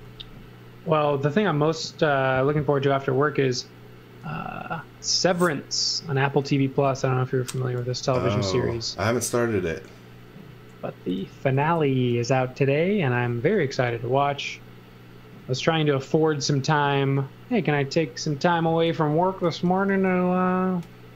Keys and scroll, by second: 0.0-0.4 typing, 6.7-8.5 typing, 11.2 m, 13.6 e, 14.6 e, 18.6 x, 18.9 v, 20.1 e.